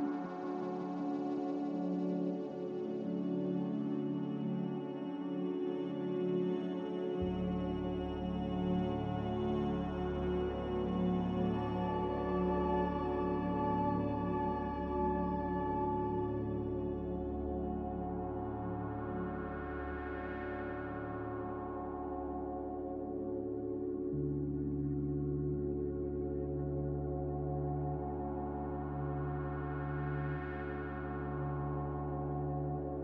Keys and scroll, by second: 2.2 Escape, 9.4 z, 16.4 3, 16.5 0, 16.7 Return.